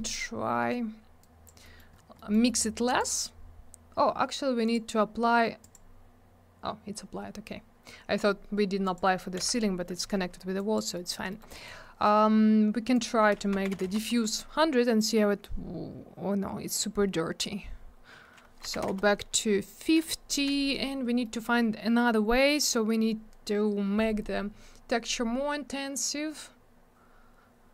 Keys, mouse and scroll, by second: 1.2 click, 1.6 middle click, 1.8 middle click, 1.9 scroll down 1, 2.2 middle click, 2.3 middle click, 2.5 middle click, 2.6 middle click, 3.0 click, 3.1 double click, 3.2 click, 4.7 click, 4.7 click, 5.7 click, 5.7 click, 8.8 click, 9.0 click, 9.4 m, 10.6 click, 10.8 click, 10.9 middle click, 11.1 double middle click, 11.3 middle click, 11.4 middle click, 11.6 middle click, 11.7 double middle click, 12.9 click, 13.1 click, 13.5 1, 13.9 Return, 18.7 5, 18.8 Return, 21.2 middle click, 21.4 middle click.